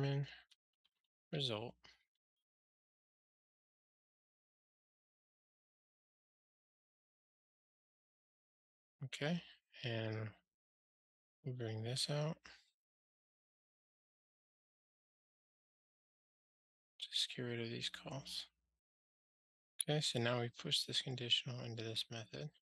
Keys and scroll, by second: 7.0 super+c, 7.8 super+v, 11.5 super+c, 14.4 super+v, 16.8 ctrl+g.